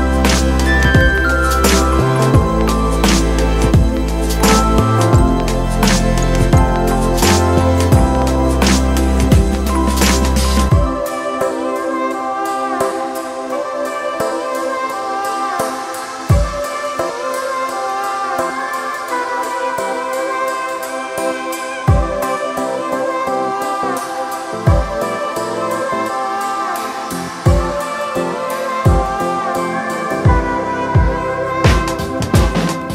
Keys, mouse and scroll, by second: 6.0 ].